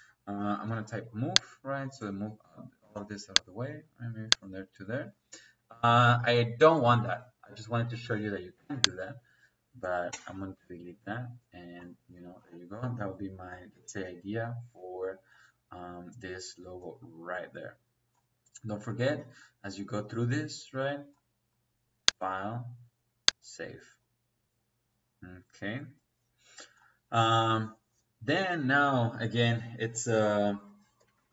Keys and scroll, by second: 0.2 m, 0.5 o, 0.7 e, 0.7 space, 2.7 space, 4.5 Escape, 10.0 Delete, 31.0 Escape.